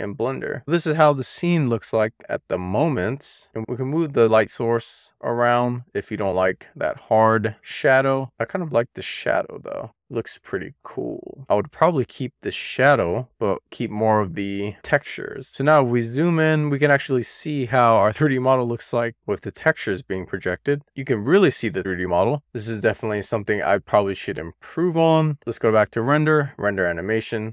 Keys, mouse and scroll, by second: 0.0 shift+middle click, 0.3-0.8 scroll up 1, 0.8-1.3 scroll up 5, 1.3 shift+middle click, 2.0-2.5 scroll down 4, 2.5 shift+middle click, 2.9-4.2 scroll up 1, 4.2 click, 5.0-7.0 scroll down 2, 7.0 click, 8.7 super+z, 10.4 click, 11.7 click, 14.6 super+z, 15.9-16.8 scroll up 2, 17.1 middle click, 17.7-18.1 scroll down 1, 18.1-19.2 scroll up 2, 20.4-21.4 middle drag, 21.8-22.2 scroll down 2, 22.9 scroll down 8, 23.2 shift+middle drag, 23.5-24.7 middle drag, 25.1 scroll down 2, 25.8 click, 26.3-27.5 drag.